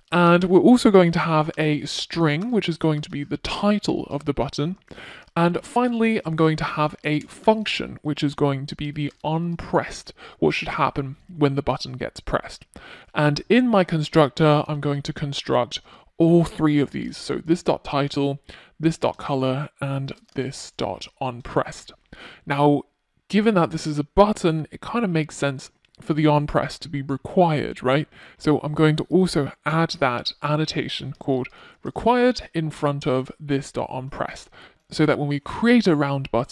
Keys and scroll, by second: 15.5 Return.